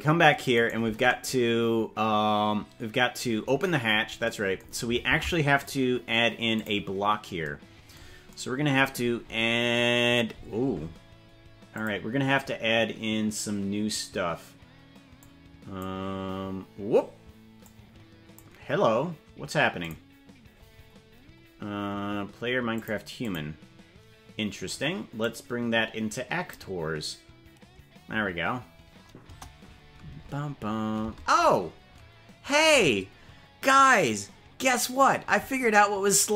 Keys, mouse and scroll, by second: 0.7 right click, 5.3 ctrl+Tab, 5.6 click, 6.6 click, 9.0-10.0 scroll up 7, 11.7 click, 15.2 click, 17.7 click, 19.8 click, 20.7-21.5 scroll down 7, 20.8 middle click, 22.8 click, 23.2 click, 25.2-26.5 drag, 29.2 KP_0, 30.0 space, 31.2 space, 36.2 click.